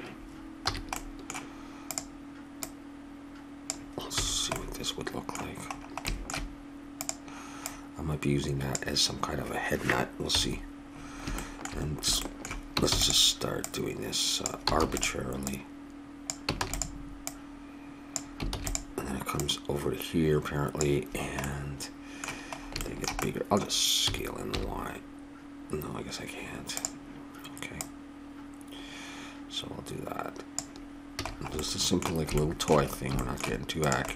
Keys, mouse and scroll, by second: 0.6 a, 1.0 middle click, 1.2 click, 1.4 middle click, 1.9-4.4 drag, 4.2 a, 4.4 middle click, 7.0-9.4 drag, 10.3 KP_7, 11.4 middle click, 11.8 middle click, 12.8 shift+d, 13.6 click, 14.8 shift+d, 16.6 shift+d, 18.5 shift+d, 19.0 click, 21.1 click, 21.4 middle click, 23.4 middle click, 24.0 s, 27.8-29.4 drag, 31.2 a, 31.3 middle click, 31.7 middle click, 32.0 middle click, 33.8-34.1 drag.